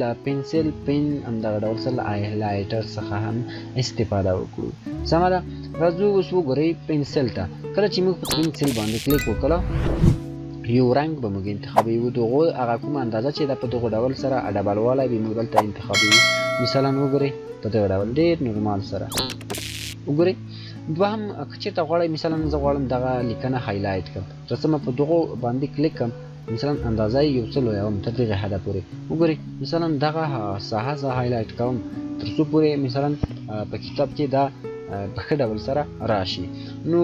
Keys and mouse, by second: 5.7 shift+click, 8.5 shift+click, 12.7-20.9 shift+drag, 24.1 shift+click, 26.9-35.6 shift+drag.